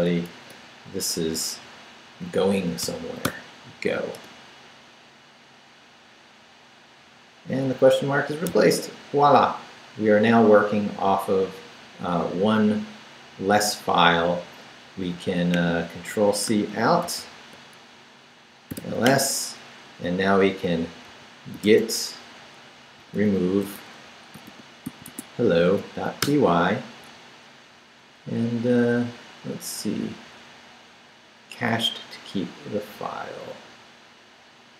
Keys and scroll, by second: 0.3 shift+/, 2.8 g, 3.2 o, 4.1 Return, 17.0 ctrl+c, 18.7-19.5 typing, 20.8-25.4 typing, 26.2 Return.